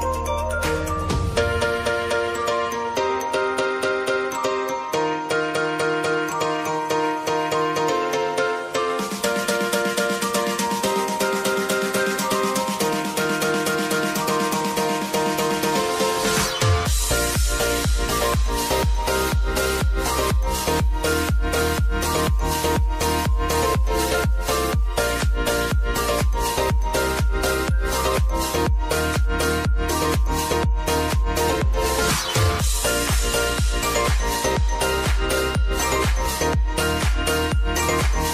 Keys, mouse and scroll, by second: 0.1 space, 2.2 space, 4.2 click, 5.0 ctrl+d, 6.2 click, 8.7 ctrl+a, 10.8 click, 16.3 click, 17.6-19.4 typing, 19.7 ctrl+a, 21.0 click, 26.3 ctrl+alt+Home, 28.3 click, 31.2 s, 31.8-34.1 drag.